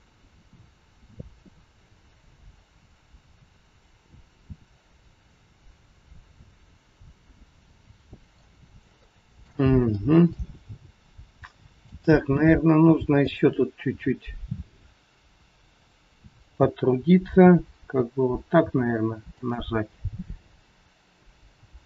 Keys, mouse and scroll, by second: 8.2 middle click, 8.7 scroll up 2, 8.9 shift+middle click, 9.8 middle click, 11.8 click, 13.2 click, 17.3 click, 17.3 g.